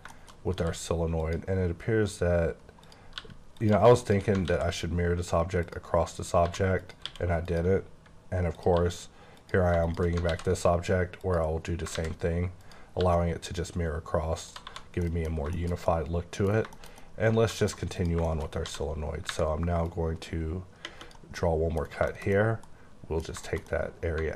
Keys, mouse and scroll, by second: 0.1 shift+middle click, 0.6 q, 1.2 click, 1.6-2.9 scroll down 1, 2.9 click, 3.2 g, 3.6 click, 4.5 alt+x, 4.8 scroll down 2, 5.6 click, 6.2 scroll up 2, 6.8 click, 7.0 q, 7.5 click, 7.8-8.2 scroll down 1, 8.2-8.6 scroll, 8.6 click, 8.7 g, 9.4 click, 10.3 x, 11.2 click, 11.9 a, 12.6 click, 13.0 g, 14.4 click, 14.6 1, 14.7-15.5 scroll down 5, 15.0 middle click, 15.5 shift+middle click, 16.5 scroll down 2, 16.7 middle click, 17.0 double middle click, 18.0 click, 18.5 shift+scroll up 1, 18.6 d, 19.9 click, 21.4 middle click, 21.8 scroll down 3, 22.1 shift+middle click, 23.1 scroll down 1, 23.4 shift+middle click, 23.7 double middle click.